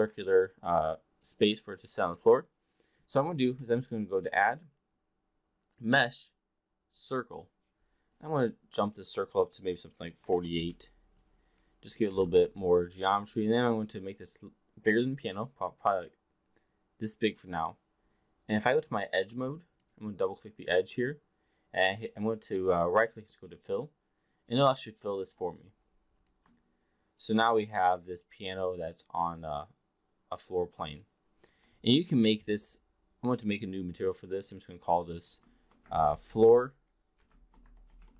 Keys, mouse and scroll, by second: 3.6 click, 4.3-7.3 drag, 8.6-11.5 drag, 12.1 e, 12.2 r, 13.6-17.4 drag, 19.3 2, 19.9 click, 22.7-23.7 right drag, 24.7 alt+click, 25.6 4, 26.5-31.1 alt+drag, 31.6 click, 33.9 click, 34.9-38.1 drag.